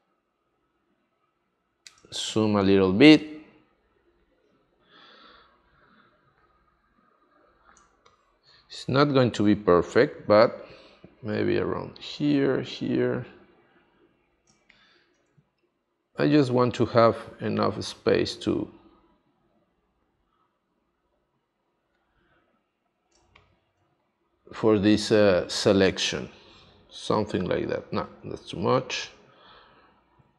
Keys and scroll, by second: 2.0 space, 7.7 space, 14.5 space, 23.1 space, 27.9 super+z.